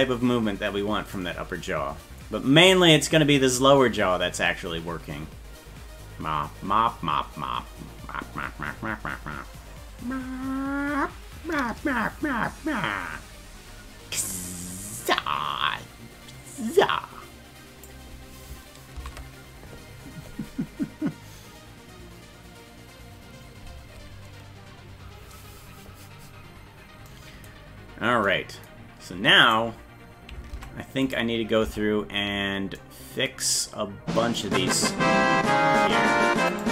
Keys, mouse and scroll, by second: 1.1-14.6 drag, 14.8-17.9 drag, 19.0 ctrl+z, 26.6-27.0 scroll up 2, 29.5 right click, 30.5 ctrl+Tab, 31.1 right click, 31.7 Tab, 35.3-35.6 scroll up 5, 36.5 right click.